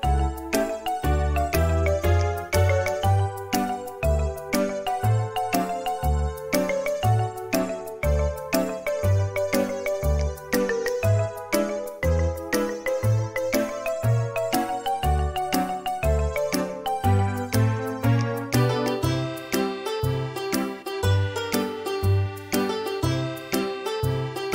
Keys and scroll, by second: 0.9 space, 2.9 space, 6.2 typing, 9.0 typing, 9.8 Return, 10.3 space, 12.1 Delete, 16.3 f, 18.3-18.7 typing, 21.8 Return.